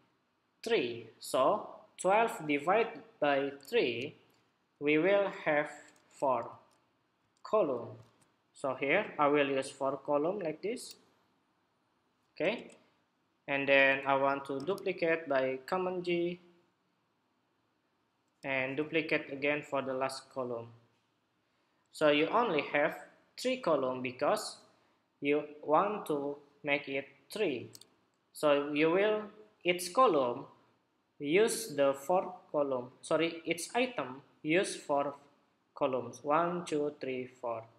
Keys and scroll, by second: 3.5 super+-, 7.7 super+t, 14.4 super+j, 18.3 super+j, 22.0 super+=.